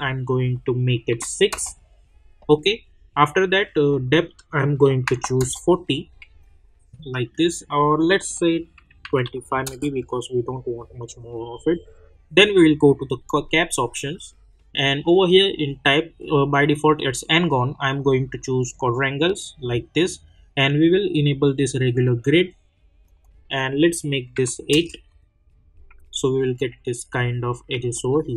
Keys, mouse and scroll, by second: 1.5 Return, 3.7 click, 5.4 Return, 5.9 scroll down 1, 6.4-8.2 alt+drag, 9.6 Return, 12.4 click, 15.2 click, 17.6 click, 21.1 click, 24.7 Return, 26.1-27.9 alt+drag, 27.9-28.3 alt+middle drag.